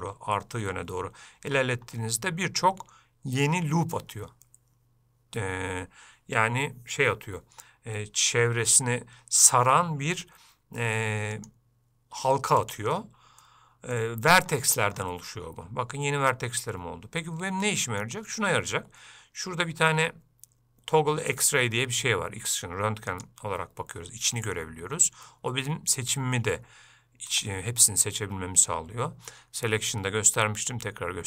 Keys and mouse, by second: 13.6 middle click, 17.3 middle click, 23.2 click, 25.4 middle click, 26.3-27.4 ctrl+middle drag, 30.1-31.2 drag.